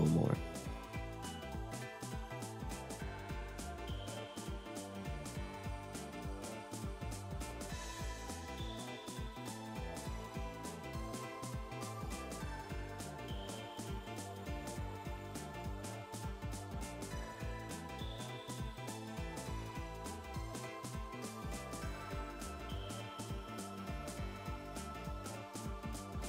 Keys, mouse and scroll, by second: 1.9-2.4 scroll down 4, 2.4 r, 5.4 r, 7.7-8.9 middle drag, 9.3 r, 12.8 r, 15.0 scroll up 2, 15.1 middle click, 15.8-18.0 drag, 18.0-18.3 scroll up 4, 18.3 r, 19.5-19.9 scroll down 5, 20.0 middle click, 20.4 scroll down 1, 20.5 middle click, 21.1 r, 22.0 r, 24.3 r, 24.9 r.